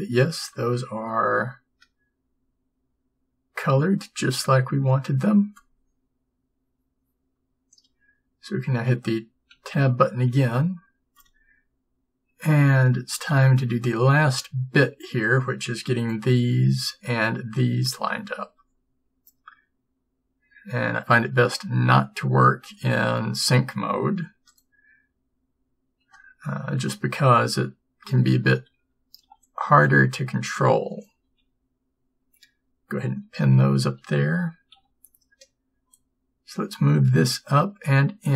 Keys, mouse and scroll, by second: 9.6 Tab, 16.2 b, 26.5 a, 26.8 a, 31.3 b, 31.3 p, 34.1 a, 36.8 b, 36.8 g.